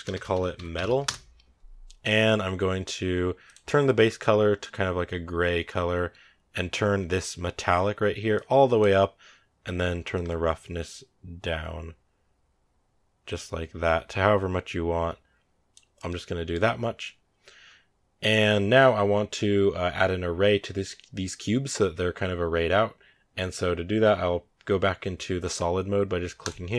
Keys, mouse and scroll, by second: 3.7 click, 6.1-7.8 scroll down 2, 8.2-13.0 drag, 15.9-26.3 middle drag, 26.3 click.